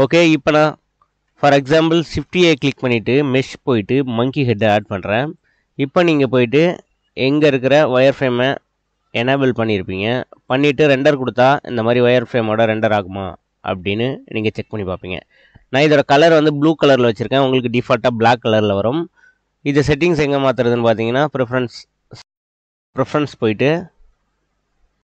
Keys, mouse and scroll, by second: 1.1 x, 2.0 shift+a, 4.6-5.2 middle drag, 6.9-8.6 drag, 9.0-10.0 middle drag, 10.1-11.0 middle drag, 11.8 click, 12.6 middle drag, 20.4-21.6 drag, 22.2 click.